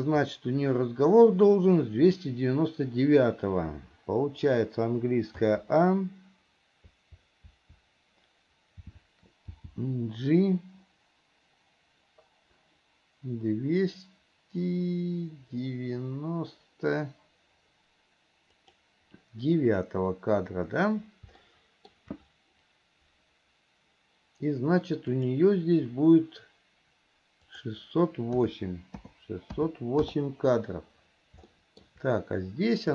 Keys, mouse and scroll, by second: 21.7 shift+middle click, 25.4 click, 27.7-30.3 drag, 31.8 shift+middle click.